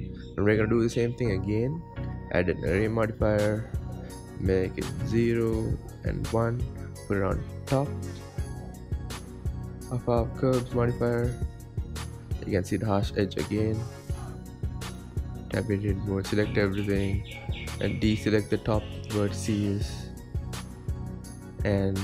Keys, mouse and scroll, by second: 0.5-0.9 shift+middle drag, 0.9-1.5 scroll up 7, 1.5-1.9 shift+middle drag, 1.9-2.4 scroll up 6, 2.4-3.1 shift+middle drag, 3.1-11.0 drag, 12.3 click, 14.7 click, 15.0 Tab, 15.4-16.2 scroll down 2, 16.2 a, 16.5-16.9 scroll down 5, 16.9 shift+middle click, 17.8-18.3 scroll up 8, 18.3 shift+middle click, 18.8-19.3 scroll up 5, 19.3 shift+middle click, 20.0 c.